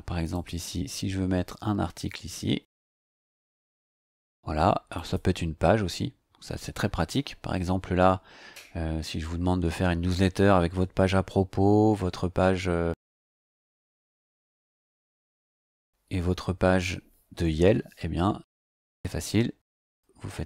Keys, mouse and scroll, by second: 0.3-2.8 drag, 4.9 click, 19.8 click.